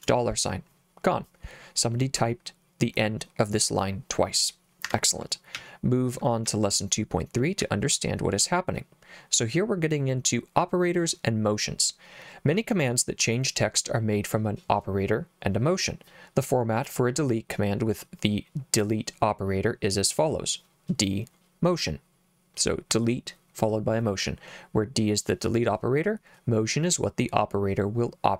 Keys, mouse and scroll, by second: 4.8 Escape, 5.5 j, 6.5 j, 7.6 j.